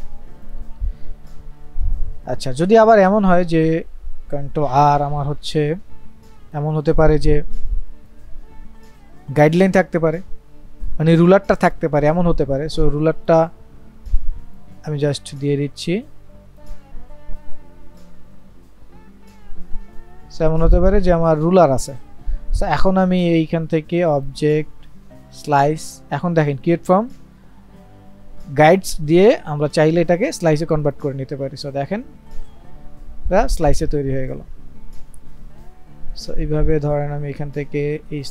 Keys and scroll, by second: 4.6 ctrl+r, 6.8 ctrl+z.